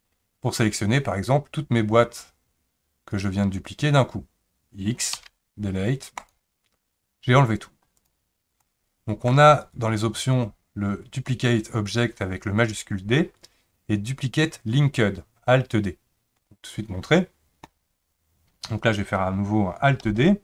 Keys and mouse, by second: 5.1 x, 8.0 click, 8.6-9.3 shift+middle drag, 9.6-15.9 right drag, 20.0 alt+d.